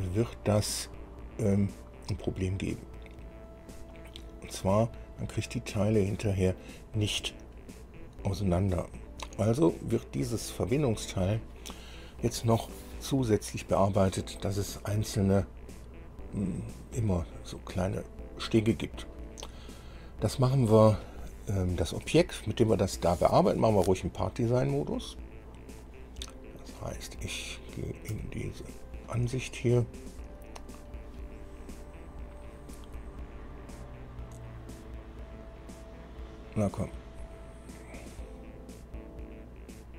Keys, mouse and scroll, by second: 8.0-8.4 scroll down 1, 10.4-10.7 scroll down 1, 11.1 click, 25.5-25.8 scroll up 1, 26.1 scroll down 1, 26.5-27.7 drag, 28.4 KP_1, 29.6-30.0 scroll down 1, 30.2 scroll down 1.